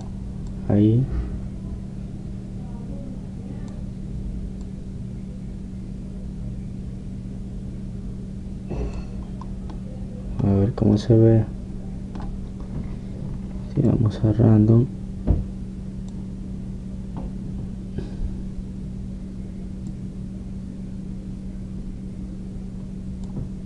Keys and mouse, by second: 1.5-3.5 drag, 5.7-7.4 drag, 10.3-14.7 middle drag, 14.9-16.9 drag, 20.9-23.6 drag.